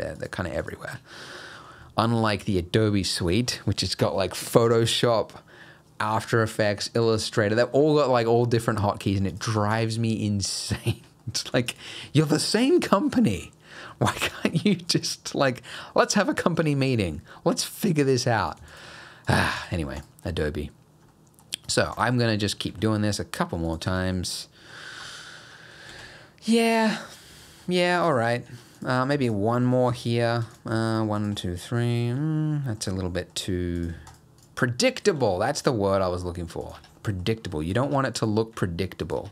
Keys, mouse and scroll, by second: 0.2 shift+click, 0.6 shift+click, 1.2 middle click, 1.8 shift+middle click, 2.3 middle click, 8.9-9.3 scroll up 1, 9.3 click, 9.7 shift+click, 11.2 middle click, 11.7 shift+click, 14.2 middle click, 17.8 middle click, 18.4 click, 18.7 shift+click, 19.3 click, 19.6 shift+click, 20.0 shift+click, 21.1 middle click, 21.7 click, 22.0 shift+click, 22.3 middle click, 22.7 e, 23.9 Tab, 24.1 middle click, 24.8-25.6 scroll down 4, 25.1 middle click, 25.6 middle click, 25.9 alt+a, 26.1 middle click, 27.7 scroll up 2, 28.0 click, 28.5 Tab, 28.8 click, 29.3 shift+click, 30.0 click, 30.5 click, 30.9 shift+click, 31.2 shift+click, 31.6 middle click, 33.1 middle click, 33.8 click, 34.1 shift+click, 34.4 shift+click, 35.2 e, 36.8 Tab, 37.0 middle click, 37.3 scroll down 1, 37.5 middle click, 37.7 scroll up 2, 37.9 Tab, 38.2 click, 38.5 g, 39.2 Tab.